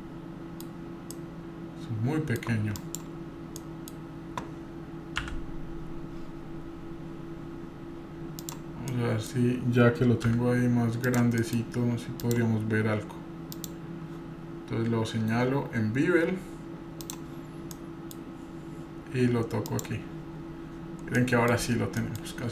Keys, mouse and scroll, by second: 1.1-2.4 middle drag, 1.1 scroll up 2, 2.8 drag, 3.6 middle click, 5.2 s, 8.9 middle click, 10.2 s, 11.4 middle click, 12.2 click, 13.5 click, 15.3 scroll down 1, 16.3 scroll down 1, 17.0 click, 20.3-21.3 scroll up 6, 21.2 middle click, 21.6-22.0 scroll down 2, 22.0 middle click, 22.4-22.5 scroll down 2.